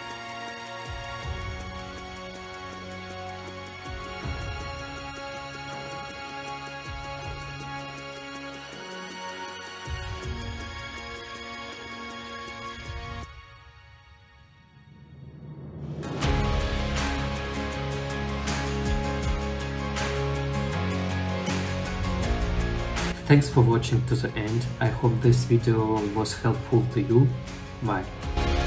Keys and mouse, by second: 2.3 r, 2.5 x, 4.1 click, 10.3 click, 16.4 click, 17.1 click, 18.8 click, 19.7 r, 19.7 x, 19.9 click, 22.2 ctrl+middle drag, 22.5 middle click, 23.4 ctrl+s, 24.5 click, 24.9 ctrl+middle drag, 26.1-27.1 middle drag, 28.4 middle click.